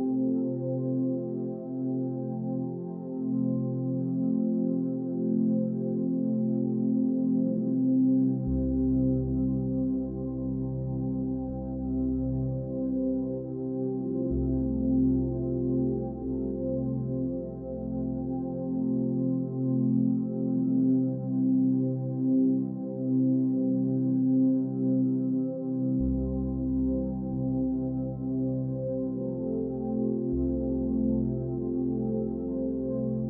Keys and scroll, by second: 2.0 ctrl+a, 6.7 Down, 6.8 Left, 7.5 Down, 7.7 Left, 8.0 Down, 10.6 Left, 10.7 Up, 10.8 Left, 11.4 Up, 11.5 Left, 13.9 Up, 14.5 Left, 16.2 Left, 16.4 Down, 19.0 Right, 20.1 Right, 21.1 Right, 21.2 Up, 21.5 Left, 23.4 ctrl+a, 32.8 ctrl+-.